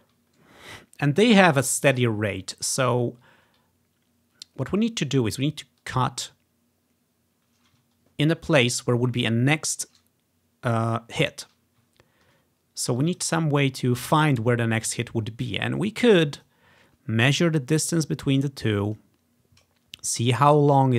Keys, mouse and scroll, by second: 2.8 ctrl+scroll down 2, 4.2-4.6 scroll down 1, 5.9 click, 8.0 scroll up 2, 9.6-10.0 scroll up 1, 12.0-13.1 ctrl+scroll down 2, 13.1-14.2 drag, 15.7-17.3 ctrl+scroll up 2, 16.5 click, 17.3-20.5 drag.